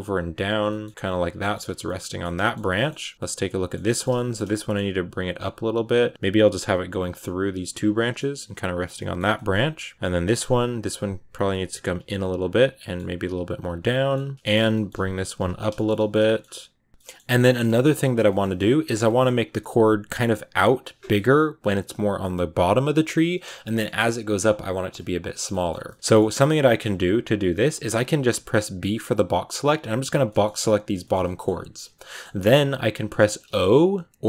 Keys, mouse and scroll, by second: 0.5 middle click, 0.7 g, 1.1 scroll down 4, 1.3 middle click, 1.5 a, 1.7-4.2 middle drag, 4.2 scroll up 2, 4.4 middle click, 4.7-8.2 typing, 6.1-6.6 scroll up 3, 7.9 middle click, 8.2-8.8 scroll down 4, 8.8 shift+middle click, 9.1 scroll up 1, 9.2-10.5 middle drag, 10.5 g, 11.3 scroll up 1, 11.4 middle click, 11.7-15.3 typing, 12.4 middle click, 13.7 middle click, 14.5 scroll up 3, 14.6 middle click, 15.2-15.6 scroll down 7, 15.6 shift+middle click, 16.0-16.7 scroll up 4, 16.1 shift+middle click, 16.7 right click, 16.9-19.3 middle drag, 19.3-22.5 scroll up 1, 22.5-23.4 scroll down 1, 23.5-28.8 shift+middle drag, 28.8 b, 29.9 b, 30.1 middle click, 31.0 scroll down 1, 31.1 middle click, 31.3-32.0 scroll up 2, 32.0-34.2 middle drag.